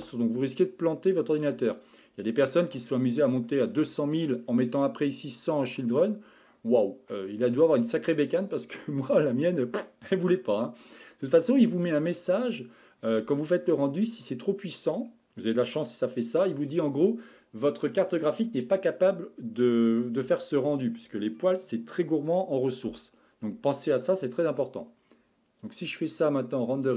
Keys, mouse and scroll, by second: 4.4 scroll down 5, 25.6-26.9 drag.